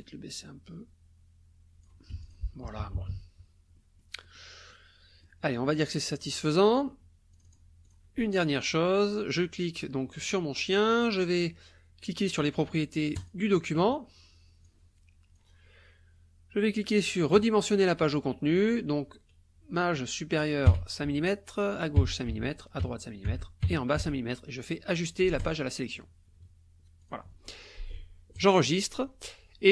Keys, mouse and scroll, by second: 2.1 F1, 2.2 click, 2.6 KP_Subtract, 3.7 click, 4.7 click, 5.7 click, 7.3 click, 7.8 click, 13.2 click, 14.6 click, 17.3 click, 18.6 click, 20.7 KP_5, 21.1 Tab, 22.0 KP_5, 22.3 Tab, 22.8 KP_5, 23.3 Tab, 23.6 KP_5, 24.0 Tab, 25.4 click, 27.0 click, 28.3 click.